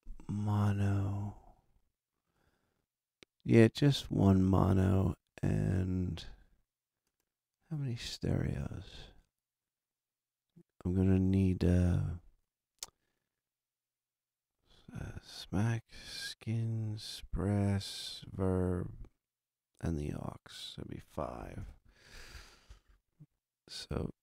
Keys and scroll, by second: 21.3 5, 21.5 Return.